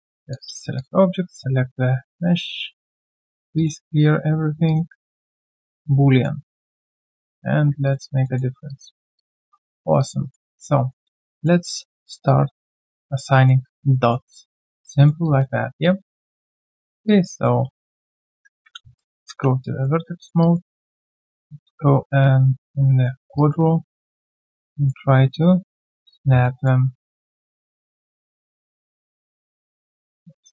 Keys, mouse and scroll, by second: 3.0 double click, 6.1 alt+middle click, 6.4 alt+click, 8.2 alt+middle click, 8.5 alt+right click, 8.7 alt+click, 8.9 alt+right click, 9.1 alt+click, 9.6 right click, 9.6 q, 10.0 alt+click, 10.2 alt+right click, 10.5 alt+middle click, 10.8 alt+right click, 11.0 alt+click, 11.3 alt+right click, 12.2 alt+click, 13.3 alt+middle click, 13.6 alt+click, 13.9 alt+middle click, 14.5 alt+click, 14.9 alt+middle click, 15.2 alt+click, 16.1 alt+middle click, 17.0 alt+click, 19.0 ctrl+shift+q, 19.6 alt+click, 20.1 alt+right click, 20.4 alt+click, 23.3 alt+click, 26.4 alt+middle click, 28.7 alt+middle click.